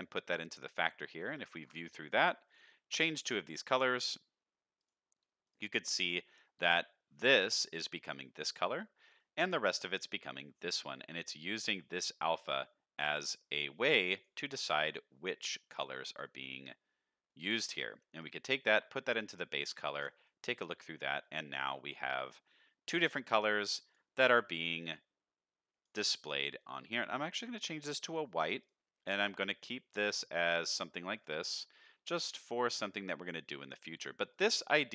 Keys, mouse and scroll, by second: 0.6 middle click, 1.6 ctrl+shift+drag, 2.4 click, 4.1 click, 5.4 click, 6.1 scroll up 1, 6.4 shift+middle click, 11.1 middle click, 12.0-14.1 drag, 15.9 click, 17.3 middle click, 18.2-19.2 drag, 19.4 middle click, 20.2 click, 20.8 middle click, 21.5 shift+middle click, 22.0-22.3 scroll up 1, 22.3 middle click, 23.3 middle click, 23.8 click, 26.6 click, 28.0 drag, 28.6 click, 31.1 click, 31.5 middle click, 32.1 click, 33.0 middle click, 33.6 click, 34.3 click.